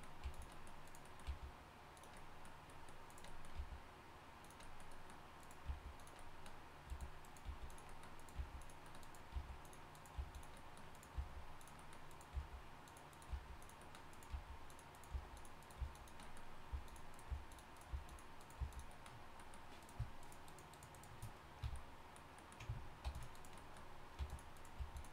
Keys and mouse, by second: 0.2 g, 1.2 g, 3.5 g, 5.6 g, 6.9-11.1 typing, 12.3-18.6 typing, 20.5 shift+right click, 21.6 f, 23.0 ctrl+r, 24.2 g, 24.5 click, 24.8 g.